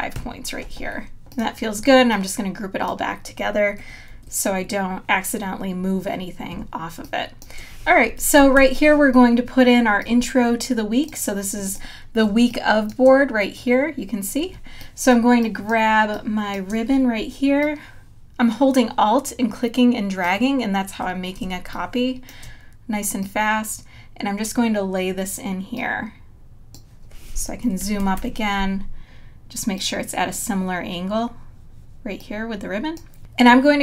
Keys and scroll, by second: 0.1 Home, 4.6 super+g, 6.6 space, 8.6 super+-, 12.3 space, 14.5 space, 21.4 space, 27.9 super+=.